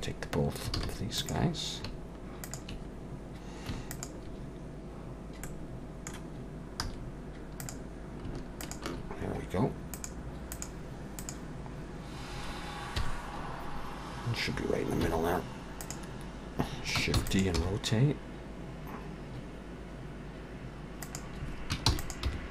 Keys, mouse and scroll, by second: 0.8 alt+a, 1.2 click, 2.4 shift+click, 4.2 shift+click, 5.4 middle click, 6.8 z, 8.6 shift+click, 9.9 click, 13.0 KP_1, 15.0 z, 17.2 shift+d, 17.5 r, 21.9 shift+d, 22.3 r.